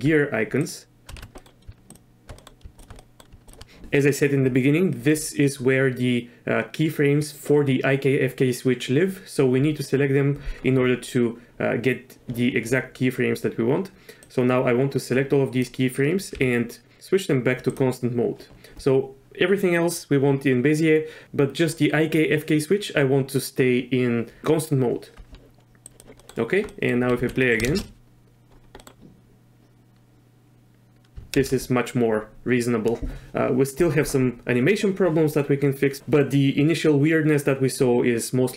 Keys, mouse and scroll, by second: 1.2 ctrl+z, 1.3 drag, 1.9 shift+click, 2.3 click, 3.0 middle drag, 3.4 shift+click, 14.2-15.7 drag, 16.3 t, 25.9 click, 26.2 middle drag, 26.7 drag, 27.1 z, 27.4 click, 27.7 shift+space, 28.8 click, 31.4 shift+space.